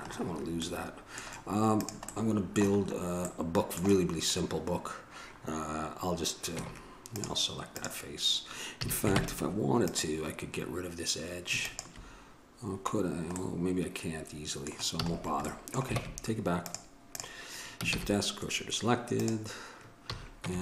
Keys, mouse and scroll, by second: 0.8 middle click, 2.0 right click, 2.5 middle click, 3.0-5.6 middle drag, 6.8 Tab, 7.9-10.2 drag, 8.9 a, 9.4 ctrl+Tab, 11.8-12.9 drag, 15.1 a, 16.2 ctrl+Tab, 18.1 shift+s, 20.2 a.